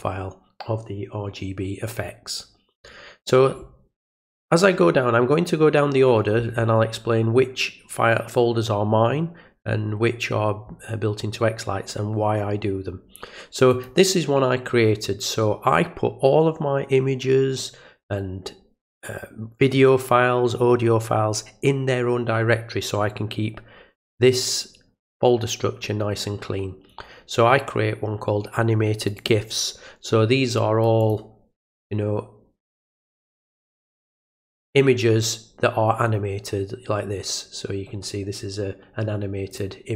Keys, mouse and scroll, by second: 13.7 click, 29.0 click, 29.2 click, 31.0 click, 33.4 click, 33.6 click, 39.5 click.